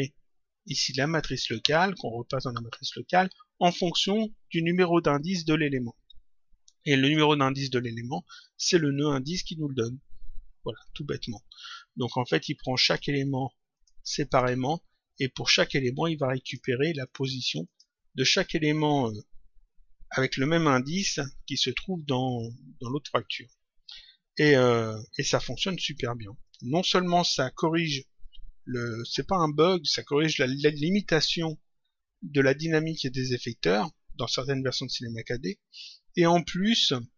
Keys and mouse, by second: 13.6 click, 15.3 click, 25.1 click, 26.4 click.